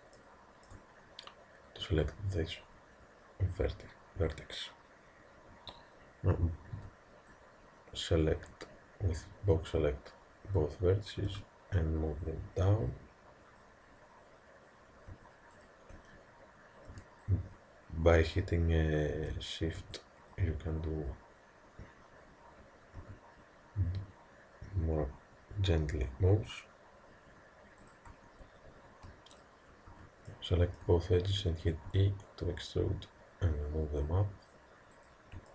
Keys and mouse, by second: 0.3-5.5 middle drag, 5.5 a, 6.7 b, 11.3 g, 16.9 b, 19.2 a, 19.8 b, 23.0 g, 29.4 click, 30.3-32.1 middle drag, 31.9 e.